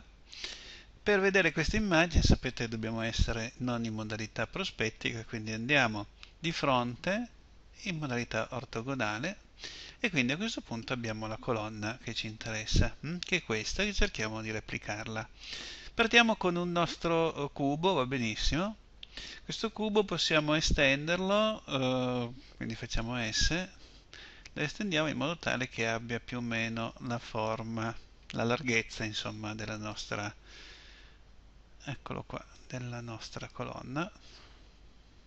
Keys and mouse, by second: 6.3 KP_1, 23.0 s, 29.9-32.5 middle drag, 33.4-35.2 middle drag.